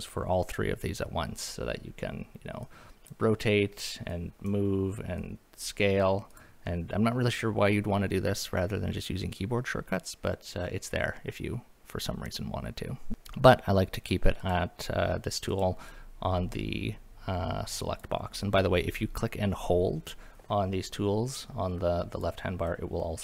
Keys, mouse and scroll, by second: 2.6 click, 4.1 drag, 5.3 click, 6.3 click, 6.7-7.3 middle drag, 13.1 click, 14.4 click, 15.5 click, 15.9-18.0 drag, 18.4-21.0 drag, 22.7-23.2 drag.